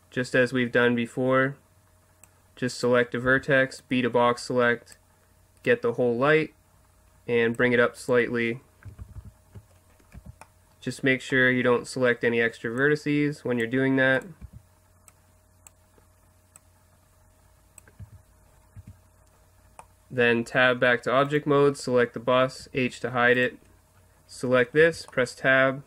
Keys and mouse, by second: 2.7-4.9 right drag, 3.2 b, 5.7 click, 7.4 click, 9.0 ctrl+z, 9.5 ctrl+z, 10.1 b, 12.8 click, 14.4 b, 15.7 click, 18.2 z, 18.5 middle click, 18.8 Tab, 21.3-22.8 right drag, 22.6 h, 23.3-24.8 right drag, 24.8 Tab, 25.0 click, 25.1 right click, 25.2 click.